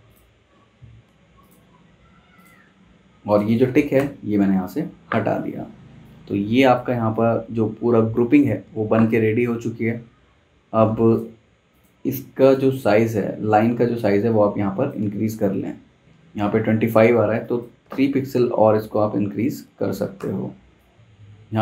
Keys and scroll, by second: 2.1 super+z, 3.9 BackSpace, 17.2 z, 17.8 v, 19.7 a, 20.2 v.